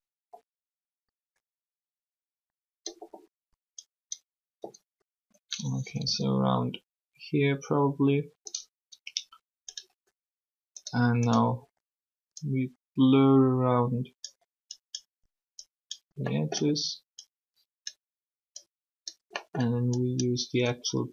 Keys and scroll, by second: 5.8 typing.